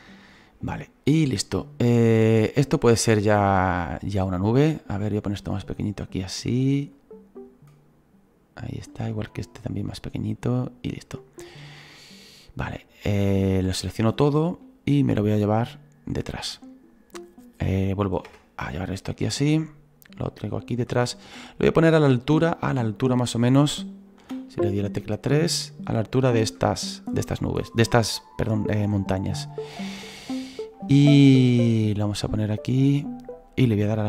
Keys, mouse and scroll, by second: 2.7-4.6 drag, 4.6 right click, 5.2 s, 6.1-8.9 drag, 8.9 right click, 9.1 s, 9.9 s, 13.5 a, 15.2-15.5 scroll down 4, 15.5-18.3 drag, 18.3 /, 18.6 scroll down 1, 18.7 middle click, 19.5-20.1 scroll up 1, 20.1 click, 21.1-22.4 middle drag, 22.4-23.0 scroll down 2, 23.0-24.4 drag, 24.4 KP_3, 25.8-28.9 drag, 30.7-34.0 middle drag.